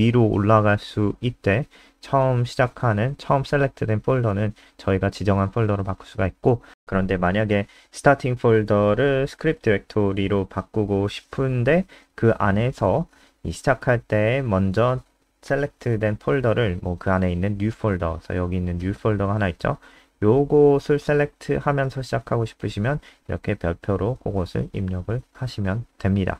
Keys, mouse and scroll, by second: 2.7 click, 6.6 BackSpace, 8.6 End, 11.7-17.0 typing, 17.1 F3, 18.6 click, 19.9 ctrl+w, 21.1 click, 25.2 ctrl+s, 25.5 F5.